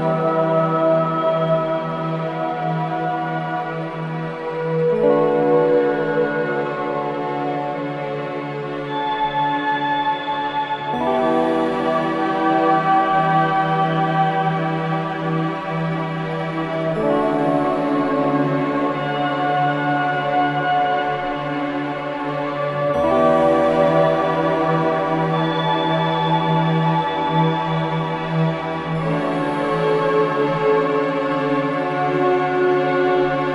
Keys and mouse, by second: 0.0-0.4 typing, 2.1 typing, 4.3 0, 5.3 alt+click, 5.8 ctrl+alt+click, 6.3 ctrl+alt+click, 6.6 alt+click, 7.4 ctrl+alt+click, 7.8 alt+click, 8.3 g, 8.5 y, 9.1 click, 9.4 alt+click, 10.8-11.5 typing, 11.5-13.1 ctrl+alt+drag, 14.1-21.3 drag, 16.7-17.4 typing, 20.2-22.6 typing, 22.6 click, 25.5 i, 26.3 click, 30.0-31.2 drag, 31.8 Left, 32.8 ctrl+alt+click.